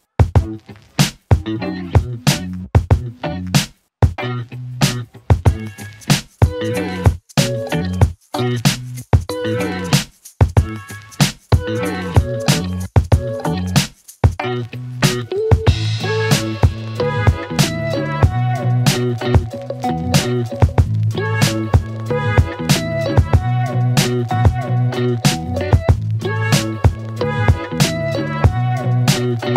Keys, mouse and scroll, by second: 1.4 shift+click, 2.7 s, 4.1 click, 6.2 Return, 8.0-9.7 click, 11.4 click, 19.5-20.5 click, 20.9 space, 25.2 space, 26.5-29.1 click.